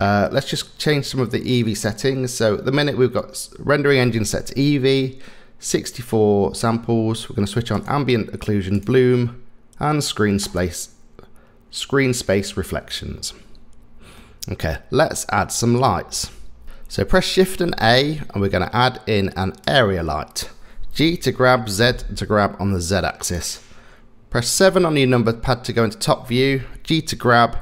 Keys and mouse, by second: 7.8 click, 8.8 click, 14.2-16.6 middle drag, 17.1 shift+a, 21.0 g, 24.6 KP_7, 26.8 g.